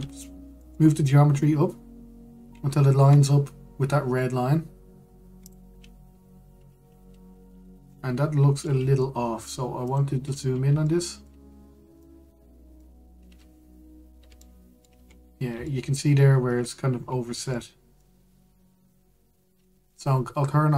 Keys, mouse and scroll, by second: 0.5 g, 8.6-10.5 middle drag, 10.5 click, 11.1-11.5 scroll up 1, 11.5 shift+middle click, 12.1-12.7 scroll up 1, 12.7-15.7 shift+middle drag, 15.7-16.3 scroll up 1, 16.3 shift+middle click, 16.8-17.7 scroll up 1, 18.2 shift+middle click, 18.9-20.7 scroll up 1.